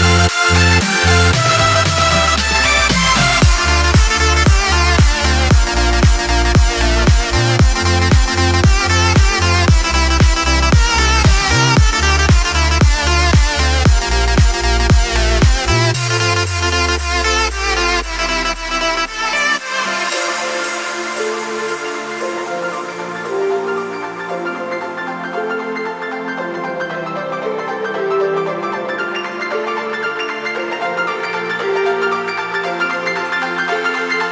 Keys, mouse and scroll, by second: 0.6 click, 1.5 click, 2.7 KP_7, 2.9 KP_5, 3.2 KP_Decimal, 3.5 KP_8, 3.7 KP_Enter, 5.6 ctrl+shift+j, 10.1 click, 13.0 click, 13.8 click, 18.0 click, 19.2-21.0 drag, 24.2-27.1 drag, 30.3 m, 30.9-34.3 drag.